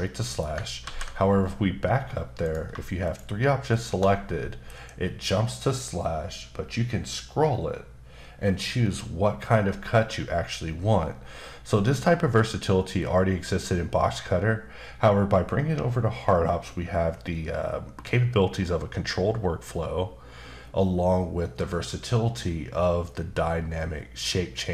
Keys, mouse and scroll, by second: 0.8 ctrl+z, 2.4 click, 3.0 shift+click, 3.7 shift+double click, 4.7 shift+b, 6.8-8.7 scroll down 1, 8.7-9.6 scroll down 1, 9.6-10.1 scroll down 1, 10.2-11.0 scroll down 1, 11.0-11.6 scroll down 1, 12.1-14.2 scroll down 2.